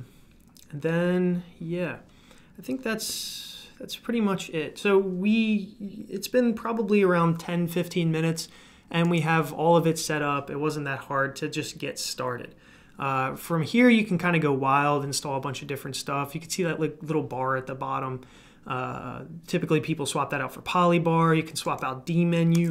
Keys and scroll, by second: 22.5 super+d.